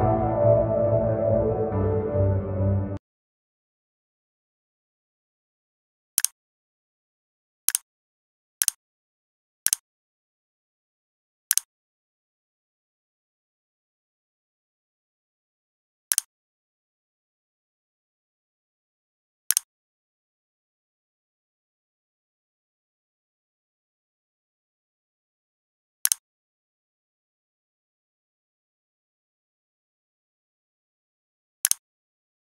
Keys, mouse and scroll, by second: 0.4 click.